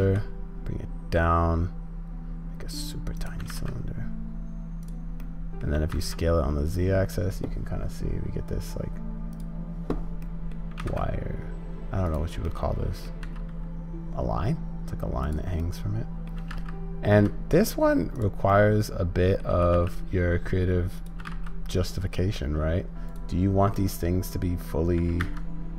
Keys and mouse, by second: 5.2 middle click, 10.3 middle click, 12.6 click, 15.7 middle click, 15.7 g, 16.4 click, 16.4 g, 18.5-21.2 middle drag, 21.2 g, 23.8 middle click, 24.1 click, 24.2 middle click, 24.2 click.